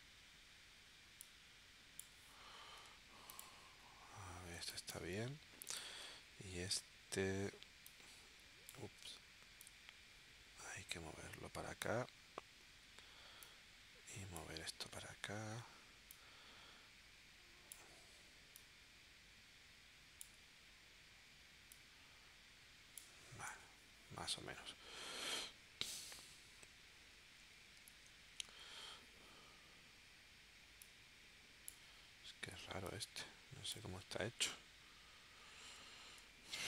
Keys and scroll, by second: 4.6 space, 27.4 super+z, 35.5 super+z.